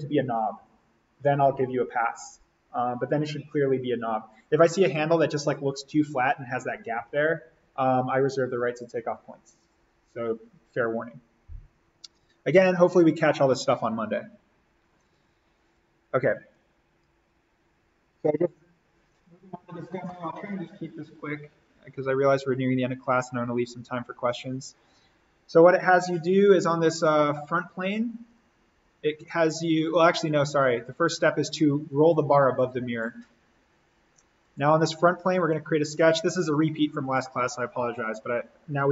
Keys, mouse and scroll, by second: 14.8 Escape, 16.5 click, 17.6 Delete, 24.3 click, 28.3-34.4 drag, 35.5 alt+s, 37.0 click.